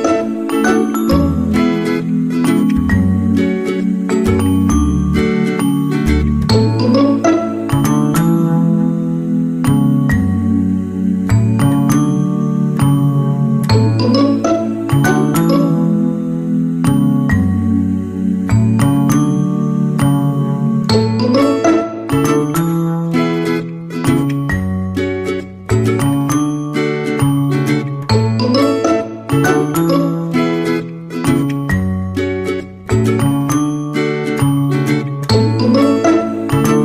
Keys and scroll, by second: 3.9 ctrl+=, 12.7 ctrl+-, 20.3 ctrl+z, 22.0 ctrl+z.